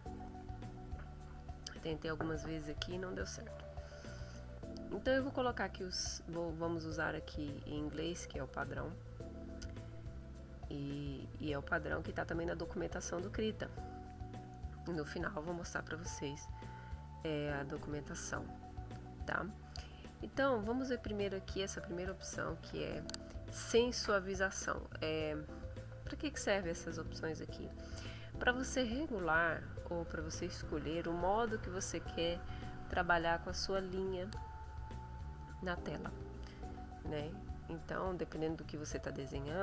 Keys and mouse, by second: 5.2 click, 7.3 click, 20.3 click, 27.6 click.